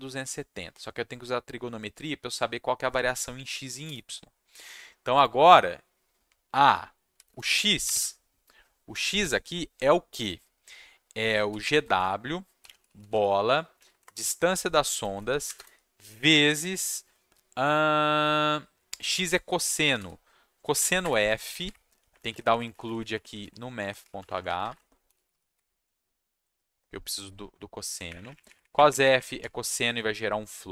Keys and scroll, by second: 6.6-7.9 typing, 11.0-13.3 typing, 13.9 Down, 14.0 Return, 15.0 space, 15.4 shift+8, 19.7 c, 19.9 s, 20.7 f, 21.0 Escape, 22.0 Up, 22.1 Down, 22.3 Down, 22.4 Down, 22.5 Down, 22.7 Down, 22.8 Down, 23.0 Down, 23.1 Down, 24.2 Left, 24.3 Left, 24.4 Left, 24.8-25.8 typing, 25.8 Down, 28.0 Up, 28.2 Up, 28.3 Up, 28.4 Up, 28.7 Up, 28.8 Up, 29.0 Up, 29.1 Up.